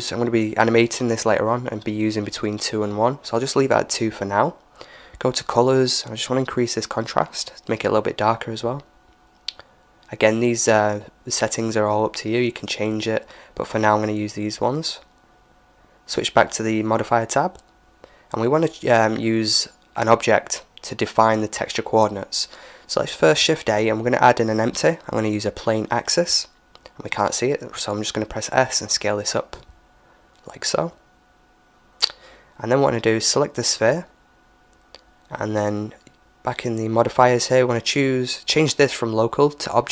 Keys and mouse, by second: 3.1-6.2 drag, 10.5-14.3 drag, 12.0-14.3 middle drag, 15.8-17.6 drag, 21.1 shift+a, 28.1 s, 30.8-32.7 middle drag, 34.2-36.1 right drag, 37.7-39.9 drag.